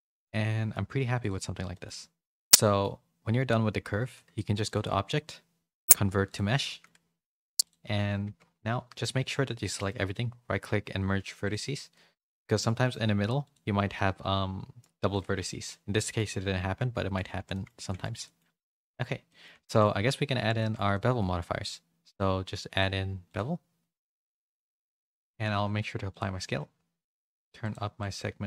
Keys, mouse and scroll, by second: 0.0 a, 0.1 a, 0.4 middle click, 1.7 middle click, 2.6 middle click, 4.6-6.3 drag, 6.6 middle click, 8.2 Tab, 8.5 1, 8.9 a, 9.7-11.5 right drag, 12.2 shift+middle click, 12.6 middle click, 13.4 click, 13.9 middle click, 15.9 middle click, 16.7 Tab, 17.2 a, 17.3 a, 17.5 shift+middle click, 17.8 middle click, 18.2 middle click, 18.7 click, 19.2 middle click, 19.6 shift+middle click, 20.5 shift+middle click, 20.9 middle click, 22.7 click, 23.2 click, 24.4 shift+middle click, 25.4 ctrl+a, 27.6 click, 28.0 click.